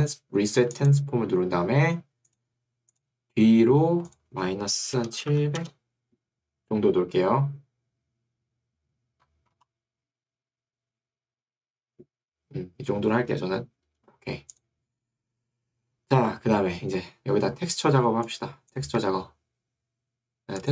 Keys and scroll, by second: 4.9-5.8 typing, 6.0 Return, 19.1 Escape.